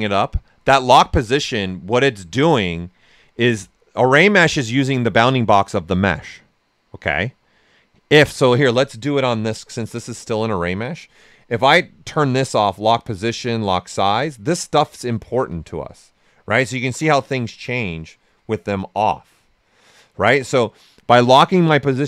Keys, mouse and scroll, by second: 9.7 alt+click, 11.7 click, 14.9 ctrl+z, 15.9-22.0 right drag.